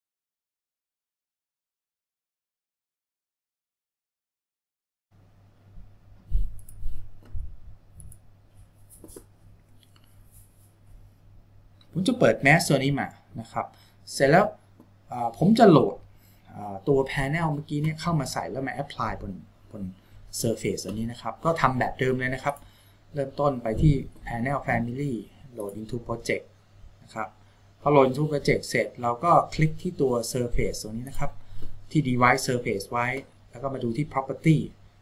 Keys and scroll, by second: 2.3 r.